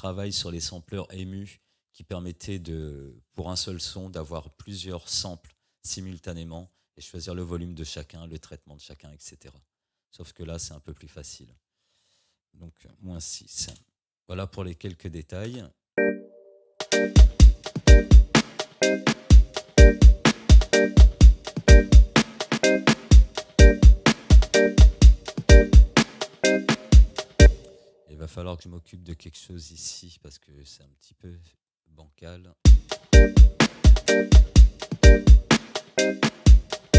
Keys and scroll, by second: 12.9 -, 13.3 6, 13.7 Return, 15.4 space, 27.4 space, 32.6 space.